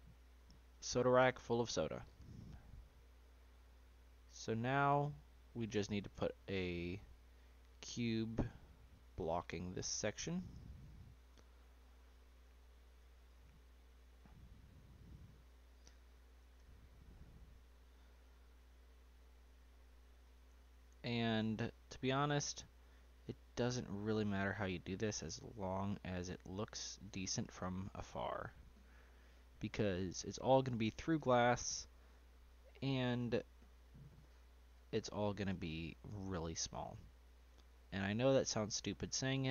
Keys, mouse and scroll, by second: 2.5 scroll up 2, 2.7-3.3 middle drag, 3.3 scroll up 1, 3.4-4.1 middle drag, 4.1 scroll up 1, 4.4-7.3 middle drag, 7.3-10.5 drag, 10.9 s, 13.0 g, 15.0-16.3 middle drag, 16.3 s, 20.5-23.0 middle drag, 23.0 g, 26.0-27.5 middle drag, 27.5-28.1 scroll up 2, 28.1-30.1 shift+middle drag, 30.1 g, 31.2 r, 35.0-36.8 middle drag, 36.8 g.